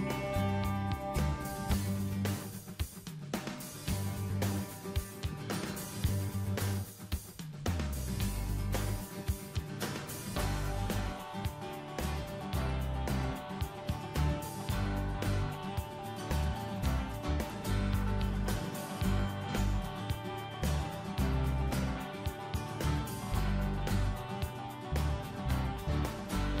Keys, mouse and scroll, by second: 0.1 click.